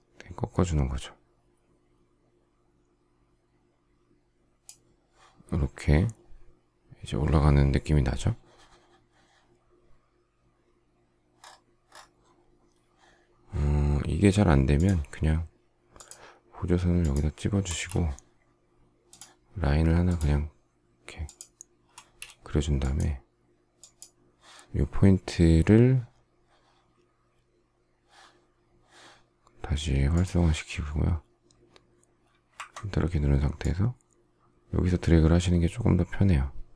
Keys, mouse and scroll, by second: 17.6 space, 21.9 space.